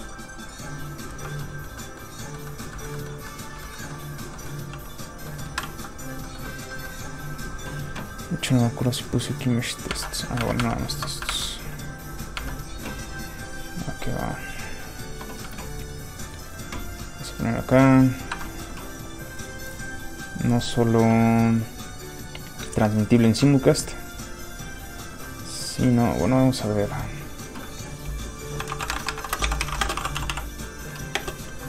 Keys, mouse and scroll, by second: 1.1 ctrl+z, 1.4 middle click, 1.5 middle click, 2.7 shift+middle click, 2.9 middle click, 3.0 middle click, 3.5 shift+middle click, 4.0 middle click, 4.2 scroll up 1, 4.7 middle click, 4.8 f, 4.9 click, 5.3 middle click, 5.6 z, 6.5 middle click, 6.6 middle click, 8.6 click, 9.9 alt+Tab, 12.0 alt+click, 14.7 alt+click, 16.2 click, 16.3 click, 18.3 Escape, 20.5 click, 28.6-31.6 typing.